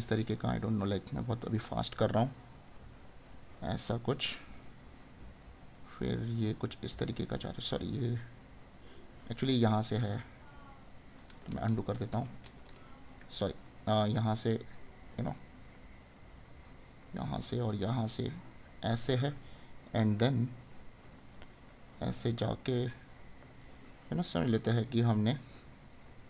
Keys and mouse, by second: 0.9 right click, 4.4 right click, 6.8 right click, 10.7 right click, 13.3 right click, 19.2 right click, 21.6 right click.